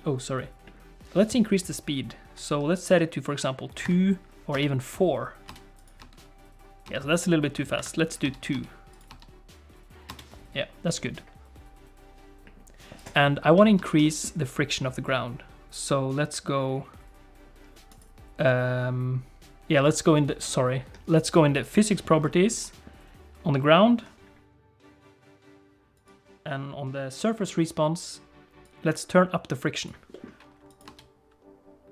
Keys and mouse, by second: 3.0 click, 3.9 click, 4.5 space, 5.5 space, 6.0 space, 6.9 space, 7.8 click, 8.2 space, 8.5 space, 8.9 click, 9.1 space, 10.1 space, 13.0 click, 13.8 shift+middle click, 14.0 middle click, 17.9 click, 21.5 click, 26.0 click, 28.6-29.9 drag, 30.1 middle click, 30.8 space.